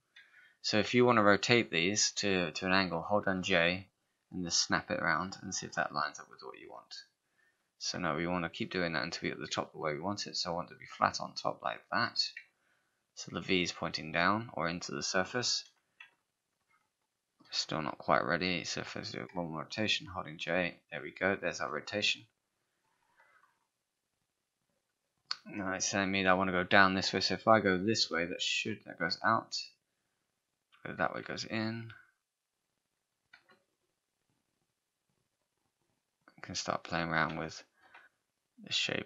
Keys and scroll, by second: 29.1 z, 33.4 z.